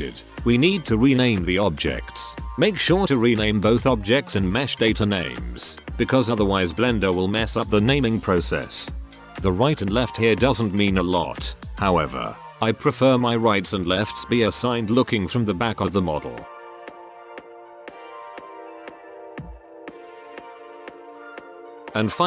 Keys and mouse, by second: 0.4 z, 1.0 middle click, 1.8 Tab, 1.8-2.3 middle drag, 5.0-10.5 right drag, 10.5 ctrl+c, 11.3 ctrl+v, 11.3-13.9 drag, 14.1-15.7 drag, 15.7 ctrl+KP_1, 16.9 click, 17.1 ctrl+c, 17.3 ctrl+v, 17.3 click, 17.5 right click, 17.8 ctrl+c, 17.9 ctrl+v, 17.9-19.3 drag, 18.2 right click, 18.5 ctrl+c, 18.7 right click, 19.3 ctrl+c, 19.4 ctrl+v, 19.4 click, 19.9 ctrl+c, 20.1 ctrl+v, 20.1-20.5 drag, 20.5-21.1 middle drag, 21.1 ctrl+KP_1, 21.2 ctrl+s, 21.5 n.